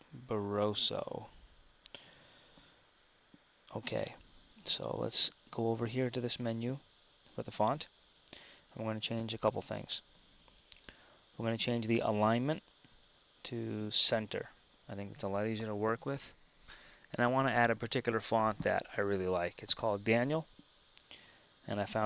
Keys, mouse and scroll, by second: 0.0-0.9 typing, 1.6 Tab, 22.0 click.